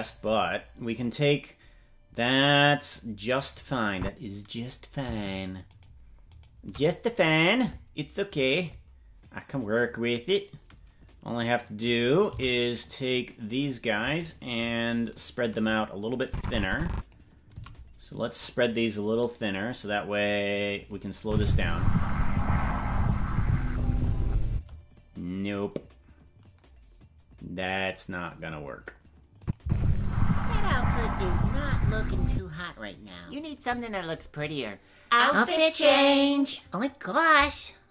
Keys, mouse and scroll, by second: 3.9 click, 5.7 shift+right click, 7.1-8.9 shift+right drag, 11.8 right click, 12.2 c, 16.2 click, 17.5 s, 21.2 space, 24.5 space, 29.4 click, 31.5 space, 32.3 space.